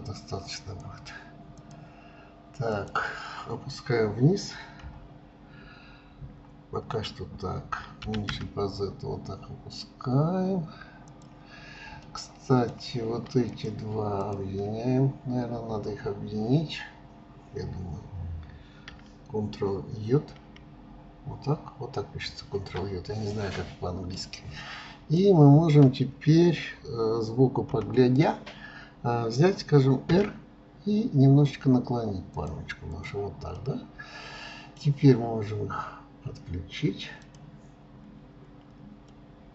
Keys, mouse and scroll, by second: 1.7 drag, 2.7 click, 12.0-13.5 middle drag, 13.5 click, 14.2 shift+drag, 23.3-27.6 middle drag, 27.7 KP_3, 30.1 r, 32.9 click, 33.5-36.6 middle drag, 37.2 click, 37.9-38.3 scroll up 2, 38.9 scroll up 4, 39.1-39.5 middle drag.